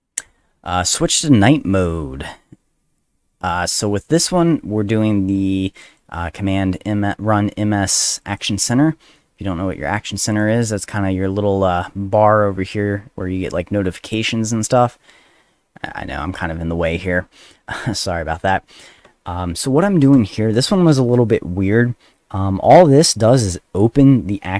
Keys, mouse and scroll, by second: 0.3 middle click, 5.7 click, 5.9 click, 8.1 click, 8.3 click, 10.3 click.